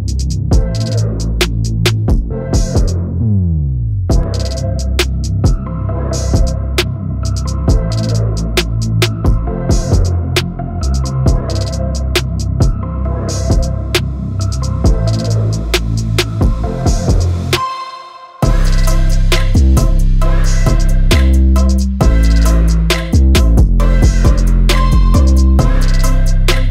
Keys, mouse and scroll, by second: 0.0 KP_1, 0.2 click, 0.6 ctrl+e, 0.7 scroll down 2, 0.7 shift+middle click, 0.8-1.2 scroll up 2, 1.2 click, 1.5 shift+middle click, 1.7 shift+click, 1.9 shift+click, 2.3 scroll down 2, 2.3 shift+middle click, 2.5 scroll up 2, 2.8 ctrl+e, 2.9 shift+middle click, 3.5 scroll up 1, 3.6 middle drag, 3.9-7.2 typing, 4.4 shift+middle click, 4.5 scroll up 1, 4.7 click, 4.8 middle click, 4.9 shift+click, 5.0 scroll down 1, 5.1-5.6 middle drag, 5.7 click, 6.4 middle click, 6.8 middle click, 6.9 click, 7.5 alt+click, 7.7 ctrl+e, 7.8 scroll down 3, 7.8 middle click, 8.1 shift+middle click, 8.3-13.5 typing, 8.7 scroll up 2, 8.8-9.3 shift+middle drag, 9.4 click, 9.6 shift+middle drag, 9.6 scroll up 1, 12.7 scroll up 2, 12.9 Left, 13.3 scroll down 1, 13.6 Left, 14.6 ctrl+e, 14.7 click, 15.1 ctrl+e, 15.3 middle click, 15.5 click, 15.9 scroll down 2, 16.0 middle click, 16.1 click, 16.3-17.8 typing, 16.4 scroll up 3, 17.7 click, 18.1 scroll down 5, 18.3 middle click, 18.6 scroll up 3, 18.6 middle click, 18.8 click, 18.9 middle click, 19.2 scroll up 1, 19.4 middle click, 19.4 g, 19.7 middle click, 19.9 click, 20.1 middle click, 20.1 g, 20.5 middle click, 20.9 click, 21.0 middle click, 21.2 g, 21.5 middle click, 21.7 click, 21.8 g, 22.2 middle click, 22.6 KP_1, 22.7 scroll up 4, 22.8 Tab, 23.0 g, 24.0 g, 25.0 click, 25.1 g, 25.3 scroll down 2, 25.5-25.8 middle drag, 25.8-26.2 scroll up 2, 25.9 Tab, 25.9 middle click, 26.2 click, 26.2 middle click, 26.3 g, 26.5 middle drag.